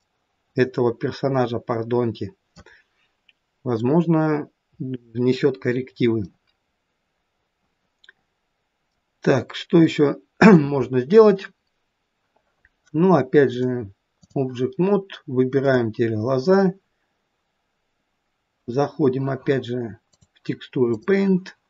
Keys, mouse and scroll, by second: 0.0 middle click, 1.6 middle click, 2.1 middle click, 4.0 middle click, 6.2 middle click, 13.5 click, 15.6 click, 20.1 click.